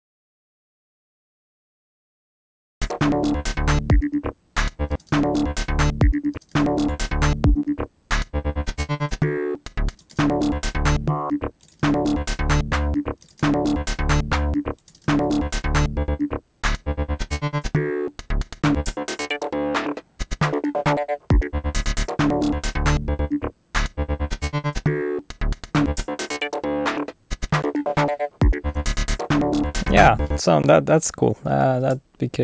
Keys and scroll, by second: 0.0-1.4 typing, 4.9 space, 6.3 space, 9.9 space, 11.6 space, 13.2 space, 14.9 space, 30.4 space, 31.7 alt+super+l.